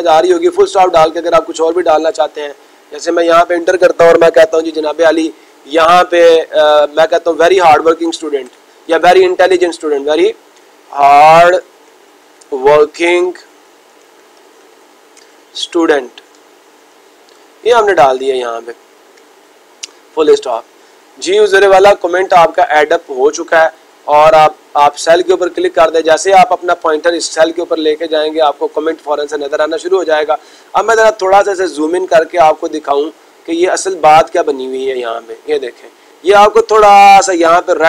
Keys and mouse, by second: 24.6-25.6 drag, 33.1 click, 34.4 click, 34.6 click, 34.9 click.